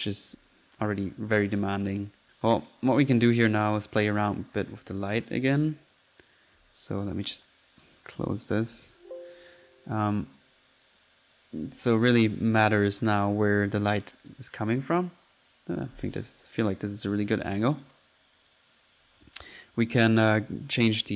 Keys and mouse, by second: 0.0-0.3 typing, 0.3 click, 2.3 click, 2.5 click, 2.9 p, 3.3 click, 4.8 click, 5.1 click, 6.3 click, 6.7 p, 7.0 click, 8.0 click, 8.5 alt+click, 9.0 alt+z, 9.4 alt+click, 9.7 alt+z, 10.0 alt+click, 10.7 alt+click, 11.4 click, 12.0 click, 12.1 click, 12.8 alt+click, 13.7 alt+click, 14.3 click, 14.4 click, 15.4 click, 15.6 click, 15.8 click, 16.2 click, 16.5-16.9 drag, 16.8 right click, 16.9 middle click, 17.2 typing, 17.6 click, 18.5 drag, 18.8 click, 19.5 click, 19.6-20.0 drag, 20.2 click, 20.5 click.